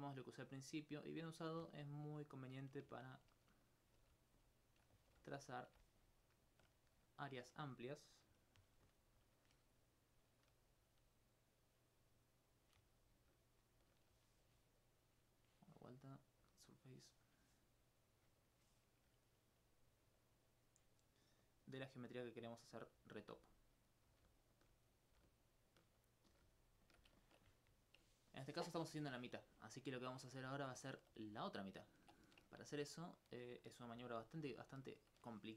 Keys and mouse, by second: 0.1 click, 0.5 right click, 1.4 click, 1.9 right click, 4.0 g, 4.7 shift+click, 5.7 shift+click, 6.0 alt+click, 6.9 right click, 9.5 d, 10.1 d, 11.3 click, 13.1 right click, 13.5 shift+right click, 15.5 middle click, 16.5-17.6 drag, 19.3 right click, 19.6 click, 20.1 right click, 20.5 click, 21.0 right click, 21.5 click, 21.8 right click, 22.1 click, 22.4 right click, 22.7 click, 23.3 g, 23.9 right click, 24.1 g, 24.6 shift+click, 24.9 right click, 25.1 g, 25.7 shift+click, 26.1 right click, 26.9 shift+click, 29.1 alt+click, 29.7 alt+click, 30.4 alt+click, 31.7 alt+click, 34.6 alt+click.